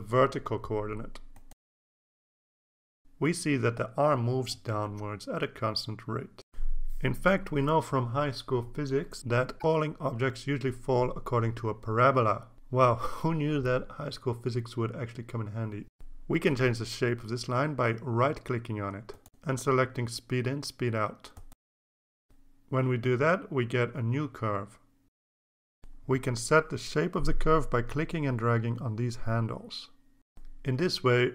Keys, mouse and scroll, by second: 1.5 right click, 3.0 click, 5.3-6.6 drag, 16.5 right click, 21.9 click, 25.7-26.7 drag, 28.7-30.3 drag.